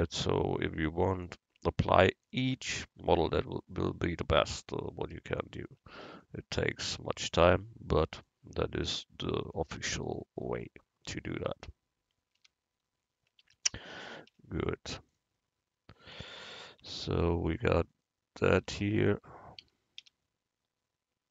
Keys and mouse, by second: 3.9 u, 5.9 Tab, 8.2-9.9 drag, 11.4 Tab, 12.5 a, 13.5 a, 14.4 u, 16.9 Tab, 17.3 click, 18.6 Tab, 19.7 a, 20.1 a.